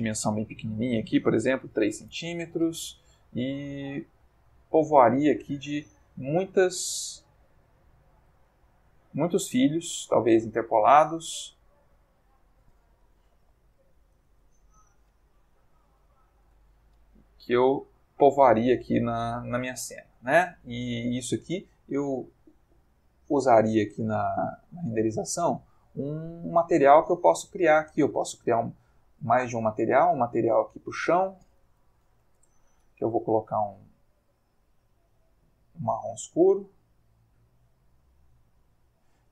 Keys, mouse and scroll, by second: 1.4 3, 1.7 c, 1.8 m, 2.1 Return, 4.6 click, 5.6 click, 6.5-8.4 middle drag, 8.6-9.4 ctrl+middle drag, 10.2 click, 12.3 click, 13.3 0, 15.1 BackSpace, 15.6 1, 15.8 0, 16.4 Return, 18.2-20.8 middle drag, 24.5 click, 25.3 middle click, 28.0 click, 29.1 click, 30.7 click, 31.6 c, 31.9 h, 32.0 a, 32.1 o, 32.3 Return, 33.8 click, 35.0-35.8 drag, 36.1-37.5 drag, 37.6 click.